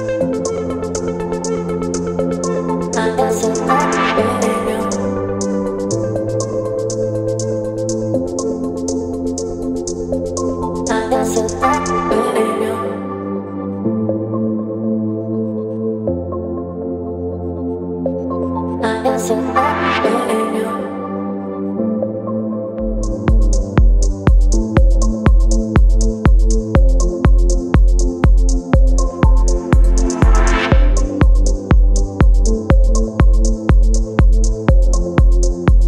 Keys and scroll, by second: 2.2 space, 4.8 ctrl+d, 6.2 space, 9.4 ctrl+BackSpace, 9.9 space, 18.2 v, 24.4 KP_9, 28.0 space, 28.7 space, 30.6 Delete, 32.9 Delete, 33.3 space, 34.0 Delete.